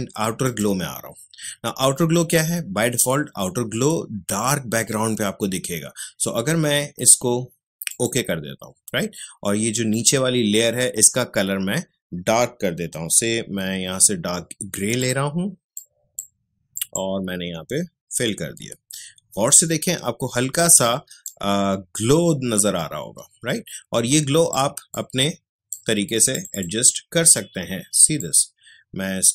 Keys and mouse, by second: 0.4 click, 7.9 click, 14.8 click, 18.2 alt+BackSpace, 20.9 ctrl+space, 21.2 ctrl+click, 21.5 ctrl+space, 24.9 click, 25.1 space, 26.3-29.3 drag.